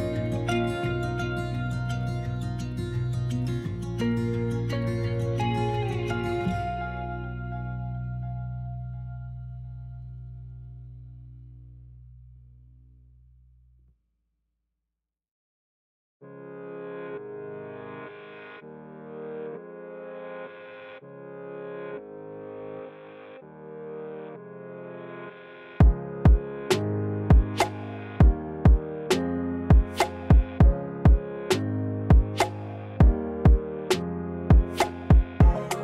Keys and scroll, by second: 12.1 s, 14.7 4, 19.8 3, 20.2 s, 24.1 1, 24.4 s, 25.8 s.